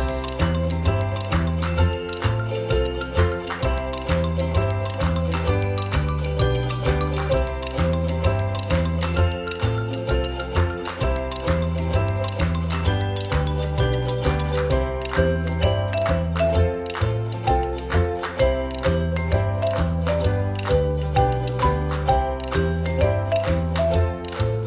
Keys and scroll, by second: 14.9 Delete, 18.4 Delete.